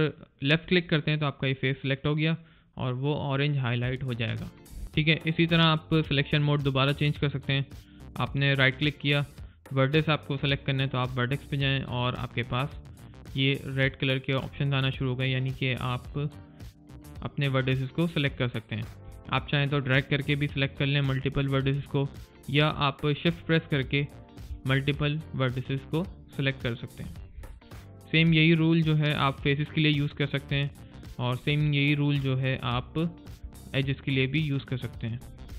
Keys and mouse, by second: 0.7 click, 6.7 right click, 13.1 click, 19.6 click, 25.0 shift+click, 25.3 shift+click, 25.9 shift+click, 26.3 shift+click, 26.8 shift+click, 27.5 right click, 30.5 click, 31.0 shift+click, 31.5 shift+click, 31.9 shift+click, 32.2 shift+click, 32.9 right click.